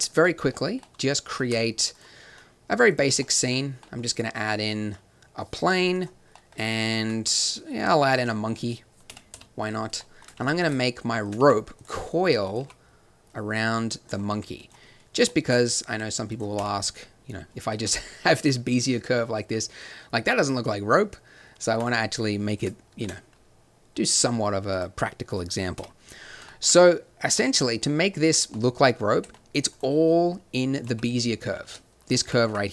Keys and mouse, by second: 1.4 shift+a, 2.3 s, 5.9-8.1 drag, 6.7 shift+a, 9.0 KP_3, 9.3 KP_5, 10.4 r, 11.4 g, 11.9 s, 12.6 g, 14.3 r, 15.9 t, 16.6-17.8 drag, 16.6 t, 17.9 click, 19.7 middle click, 20.4-22.9 drag, 22.9 ctrl+2, 25.7 KP_7, 28.2 z, 29.2 Tab, 30.8 g, 32.2 g.